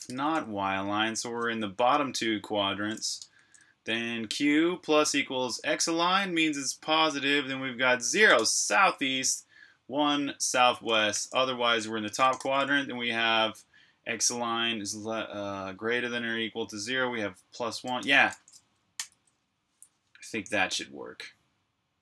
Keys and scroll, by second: 0.1-1.1 typing, 3.0 Escape, 3.2 j, 8.2 shift+v, 10.8 Escape, 11.0 typing, 12.3 shift+v, 18.0 Escape, 18.8 super+b, 19.3 Return, 19.3-20.4 typing.